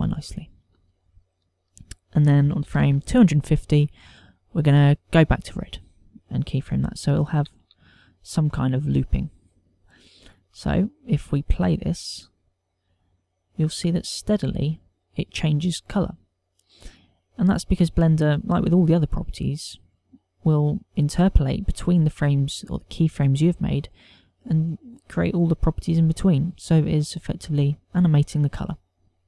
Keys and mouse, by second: 0.8 i, 2.4 ctrl+click, 4.8 click, 11.9 click, 13.1 click.